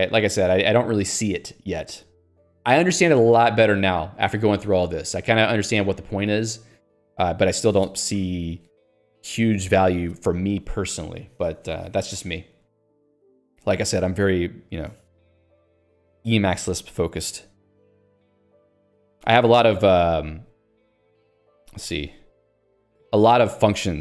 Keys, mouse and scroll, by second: 18.8 Escape, 21.6 alt+x, 21.7-22.5 typing, 22.9 ctrl+j.